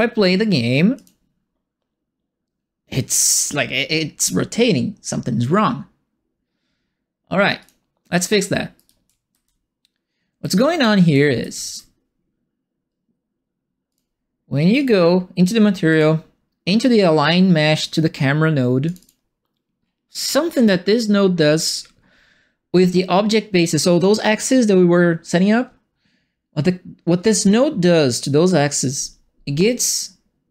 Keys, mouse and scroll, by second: 0.9 click, 7.6 click, 8.6-11.5 typing, 8.7-11.7 right drag, 13.8 click, 14.7 click, 15.9 click, 18.8 click, 19.0 click, 20.3 right click, 21.7 middle click, 22.1 middle click.